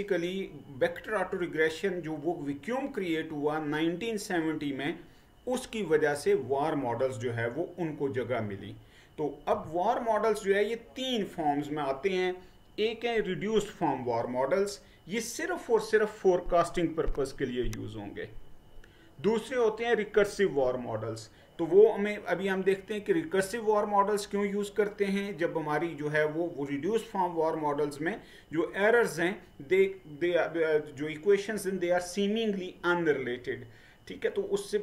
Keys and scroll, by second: 9.6 Right.